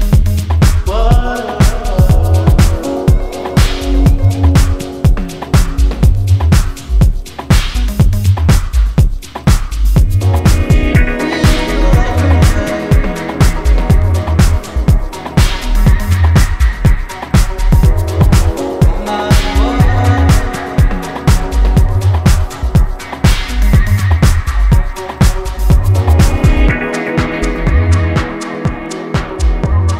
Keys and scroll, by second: 21.5 ctrl+KP_Add, 21.6 ctrl+KP_Add, 21.7 ctrl+KP_Add.